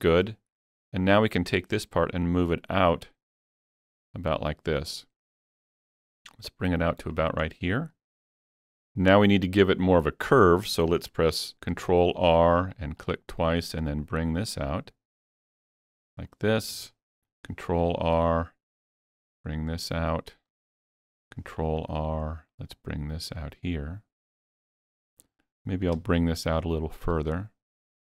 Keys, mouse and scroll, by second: 1.5-11.7 drag, 7.6-7.9 scroll down 1, 11.7 ctrl+r, 12.7 click, 13.0 double click, 13.8-18.8 drag, 17.2 ctrl+r, 18.8-22.7 drag, 21.2 ctrl+r, 23.0-24.9 drag, 26.7-28.0 alt+drag.